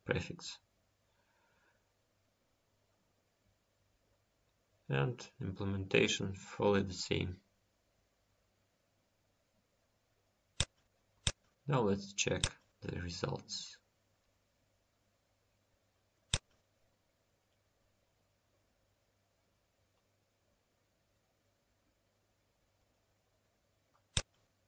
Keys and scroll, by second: 4.0 Home.